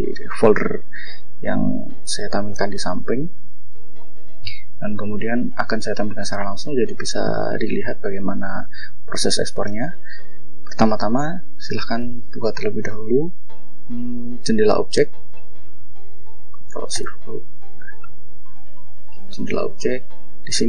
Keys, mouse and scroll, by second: 2.5 click, 4.3 click, 6.3 scroll up 1, 6.9-7.3 scroll down 2, 7.3 click, 8.1 click, 11.6 ctrl+shift+o, 14.2 click, 15.6 ctrl+click, 16.6 ctrl+shift+o, 18.5 click, 19.9 click.